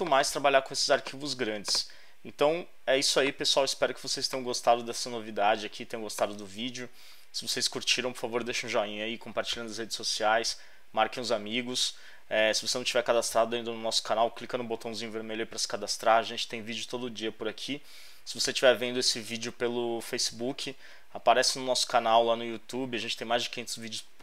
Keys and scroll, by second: 3.7 alt+space, 4.3 space.